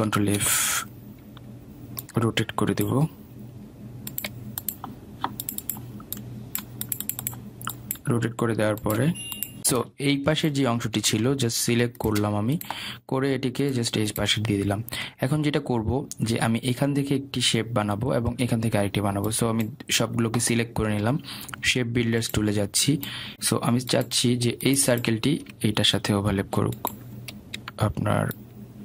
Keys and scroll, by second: 1.1 ctrl+c, 1.6 ctrl+f, 24.6 ctrl+z.